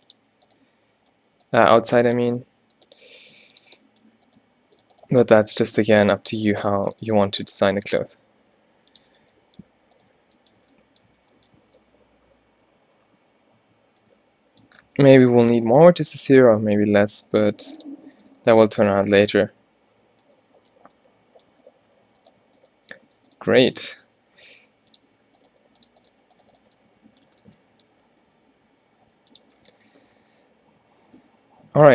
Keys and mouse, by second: 0.7 g, 1.7 g, 3.0 g, 5.5 middle click, 5.9 middle click, 6.3 e, 8.1 e, 9.3 middle click, 10.3 f, 10.7 Tab, 11.2 Tab, 11.7 a, 12.1 a, 17.5 g, 23.1 alt+w, 23.5 g, 23.9 shift+Tab, 24.1 g, 25.5 g, 26.2 g, 28.0 g, 29.4 click, 30.0 a, 30.2 a.